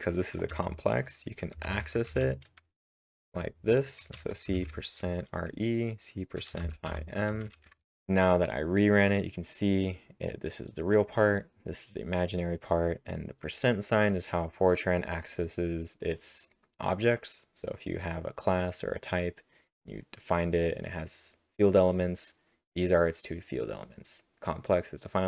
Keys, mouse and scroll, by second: 0.5-4.6 typing, 6.3-8.3 typing.